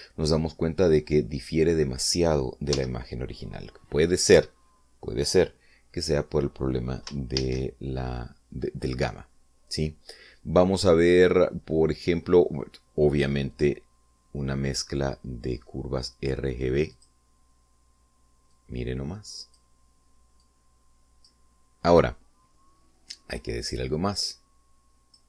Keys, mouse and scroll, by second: 3.5 x, 8.2 shift+a, 14.3 click, 17.7 click, 19.3-20.5 drag, 21.2-22.2 drag, 25.0-25.2 drag.